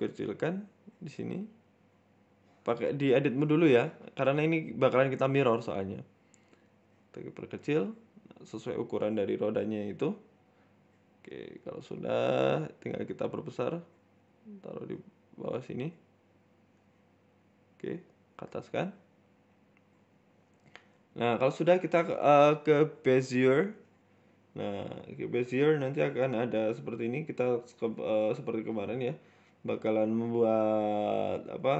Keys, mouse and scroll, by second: 0.9 s, 1.8 g, 3.3-3.8 scroll up 6, 3.5 shift+middle click, 4.5 s, 5.2 g, 6.5 s, 7.8 middle click, 8.1 scroll down 5, 8.3 middle click, 8.7 scroll down 1, 8.9 Tab, 9.3 KP_1, 9.8-10.7 scroll up 6, 10.3 shift+middle click, 10.7 Tab, 12.6 s, 13.8 g, 15.4 scroll up 2, 15.5 shift+middle click, 15.9 s, 16.8 click, 17.5 g, 18.5 scroll down 3, 18.7 middle click, 19.1 scroll down 2, 19.3 middle click, 19.4 Tab, 19.6 middle click, 20.1 KP_1, 20.5 shift+middle click, 20.8-21.2 scroll up 2, 21.1 shift+middle click, 21.2 shift+a, 21.9 shift+a, 24.0-24.3 scroll down 4, 24.3 KP_7, 24.7-25.6 scroll down 2, 25.2 z, 25.7-26.3 scroll up 4, 26.5 Tab, 27.1 right click, 27.3-27.7 scroll up 1, 28.0 r, 29.7 right click, 30.1 Tab, 30.5 g.